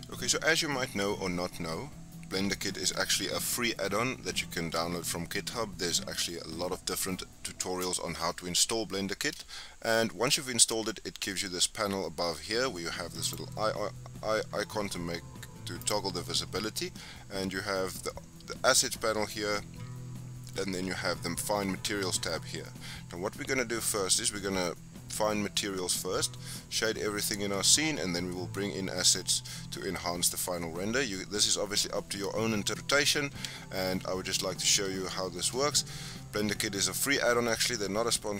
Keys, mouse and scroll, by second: 13.2-18.8 drag, 35.7-36.4 shift+middle drag, 36.4-37.0 scroll up 3, 37.0-37.7 shift+middle drag, 37.7-38.1 scroll down 4, 38.1-38.3 middle drag.